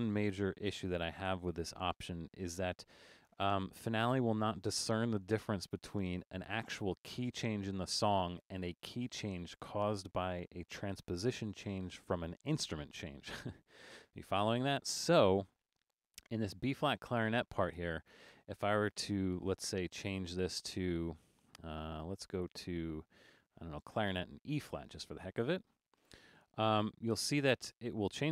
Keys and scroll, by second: 0.5 super+-.